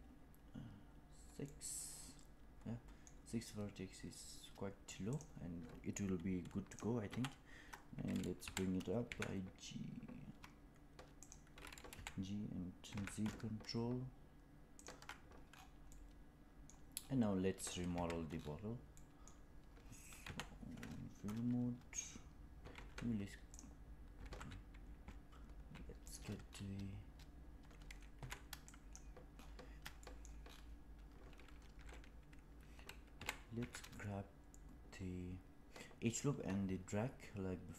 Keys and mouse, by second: 1.4-3.0 middle drag, 5.0 click, 7.0 KP_1, 8.3 g, 11.8 g, 15.8-16.6 middle drag, 17.8 Tab, 18.9 middle click, 20.1 KP_1, 22.6 alt+z, 24.2 alt+z, 25.0 z, 25.9 click, 28.1 2, 28.7 click, 29.9 shift+middle click, 33.0 g.